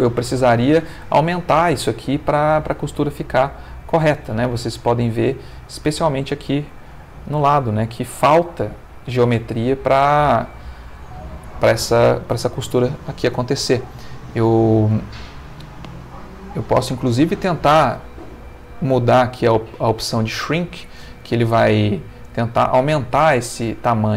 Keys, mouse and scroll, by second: 1.0-3.1 middle drag, 3.1 space, 5.7 space, 6.2 middle click, 6.9 ctrl+middle click, 9.7 ctrl+middle click, 11.2-12.5 middle drag, 14.1-15.8 middle drag, 17.0-18.7 drag, 22.2 space, 22.7 Escape, 23.8 click.